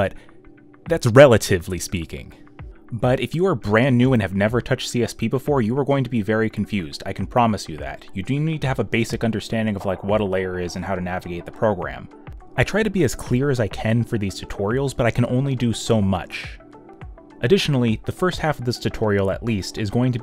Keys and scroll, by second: 2.0 y, 7.2-8.3 typing, 10.2 e, 11.4-13.3 typing, 13.9 ctrl+z, 17.7 space, 18.8 b.